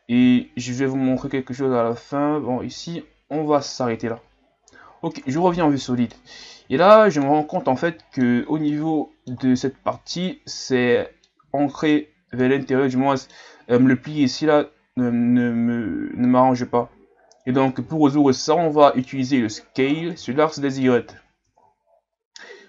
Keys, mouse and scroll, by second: 0.2 e, 4.1-4.7 scroll down 3, 4.7 z, 5.4 middle click, 6.2-7.2 scroll up 6, 7.2-10.1 middle drag, 10.1 alt+right click, 11.2-18.1 middle drag, 18.1 shift+scroll down 2, 18.4-21.3 middle drag, 21.3-21.8 scroll up 1, 21.8-22.6 scroll up 1.